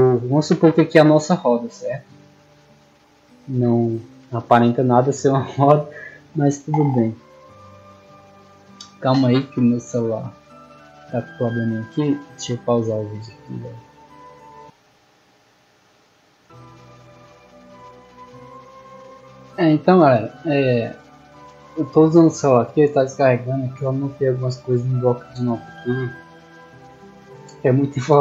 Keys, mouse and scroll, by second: 0.3-0.8 drag, 1.1 scroll up 2, 1.5 shift+middle drag, 2.9-3.3 scroll up 2, 3.5-3.8 shift+middle drag, 14.5 click, 15.2 click, 16.4 click, 19.0 click.